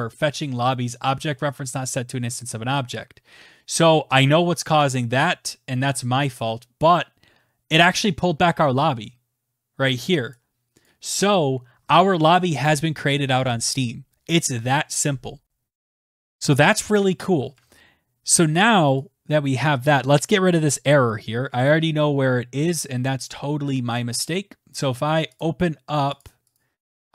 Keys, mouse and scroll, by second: 9.6 click, 10.2 click, 16.9 alt+Tab, 18.2 click, 20.4 click, 24.7 click, 26.0 click.